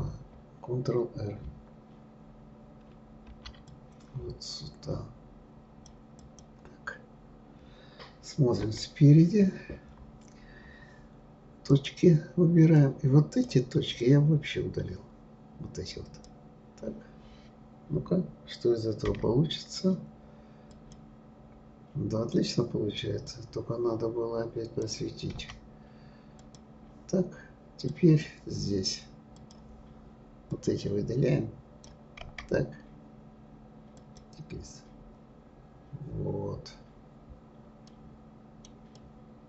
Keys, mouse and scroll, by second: 3.3 ctrl+r, 8.6 KP_1, 9.6-10.8 scroll down 2, 10.8 scroll down 2, 11.7 click, 12.8 click, 14.0 click, 19.1 Delete, 23.3 click, 25.3 Delete, 27.9 click, 29.3-30.7 drag, 32.2 Delete, 35.6-36.2 scroll down 3, 37.9-39.4 middle drag.